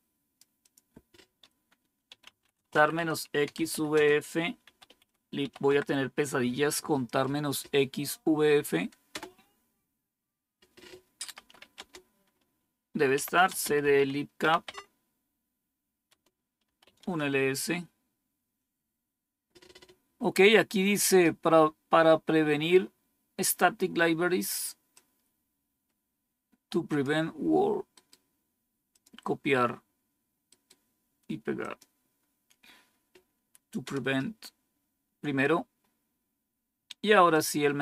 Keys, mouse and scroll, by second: 0.6 click, 1.8-5.9 typing, 9.1 Return, 11.1-14.8 typing, 16.0 Tab, 16.6 Return, 24.9-27.0 drag, 27.9 right click, 28.9 click, 30.4 right click, 31.6 click, 33.8 Return, 37.3-37.8 drag.